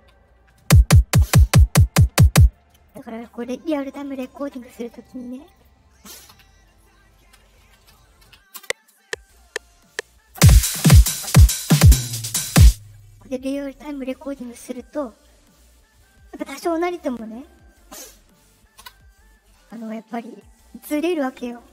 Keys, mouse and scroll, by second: 2.4-2.8 drag, 5.5 click, 8.5 space, 12.5 space, 13.4 click, 13.5 click, 20.3 middle click, 20.3-20.6 scroll up 1.